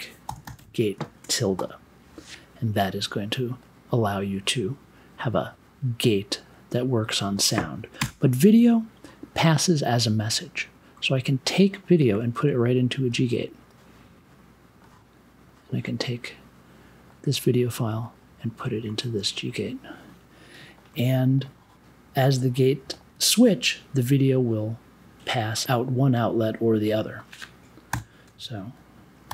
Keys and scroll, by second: 0.0-1.5 typing, 7.9 BackSpace, 27.9 n, 29.0-29.3 typing.